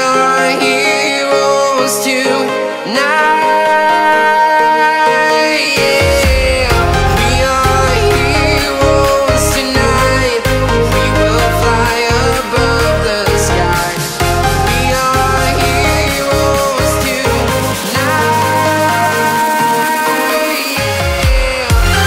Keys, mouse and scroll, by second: 0.0-1.4 typing, 1.5 Return, 2.2 click, 3.2-4.5 typing, 5.4 click, 5.7-6.2 scroll down 1, 6.2 click, 6.8-7.4 scroll up 1, 7.4 click, 8.5 scroll up 1, 9.2 shift+click, 9.3 scroll down 1, 9.8 scroll up 1, 9.8 click, 11.2 right click, 12.3 click, 12.7-13.2 scroll, 13.2 click, 13.7 right click, 14.5 click, 17.5 click, 18.5 scroll, 19.2 right click, 20.1 click, 20.4 scroll down 1, 20.8 right click.